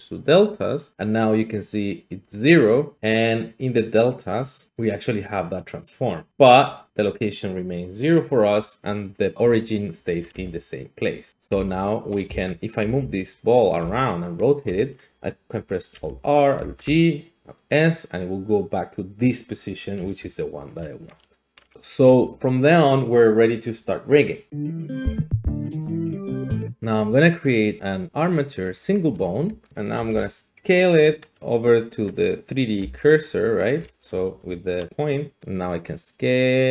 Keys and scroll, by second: 10.2 alt+g, 11.5 g, 12.3 Escape, 13.8 r, 15.9 alt+r, 16.5 alt+g, 20.0 `, 26.7 a, 29.5 alt+g, 29.7 ctrl+z, 30.0 `, 32.8-33.6 d, 34.3 d, 35.4 s.